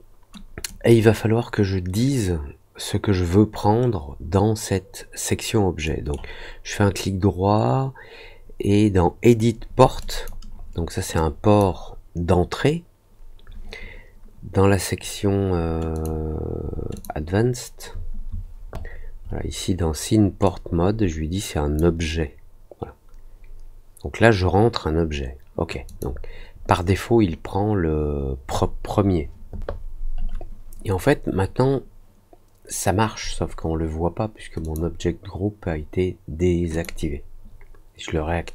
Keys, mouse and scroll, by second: 0.6 click, 5.8 right click, 9.9 click, 11.1 click, 15.9 click, 16.9 click, 20.4-21.7 drag, 25.8 click, 34.6 click, 36.7 click.